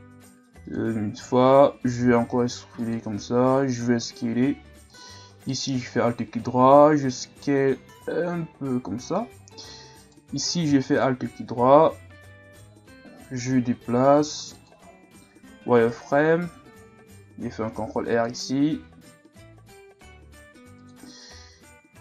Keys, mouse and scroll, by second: 2.0 e, 3.1 s, 5.5 alt+right click, 6.7 s, 10.0 alt+right click, 10.8 alt+right click, 11.8 g, 15.3 z, 16.0-17.0 scroll up 2, 17.0 scroll up 1, 17.1 ctrl+r, 21.1-22.0 scroll up 1.